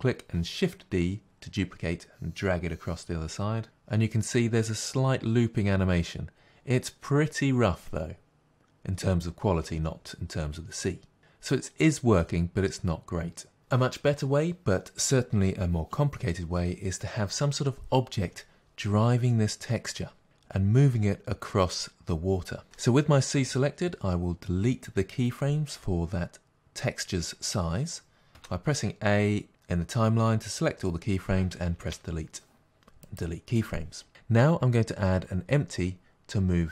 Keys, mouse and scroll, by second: 3.6-28.3 drag, 33.2 Delete.